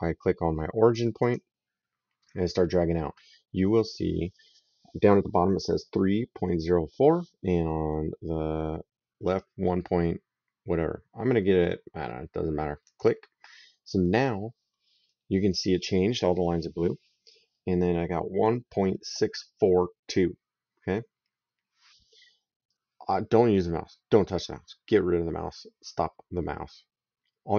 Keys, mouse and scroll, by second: 1.0 click, 12.6 click.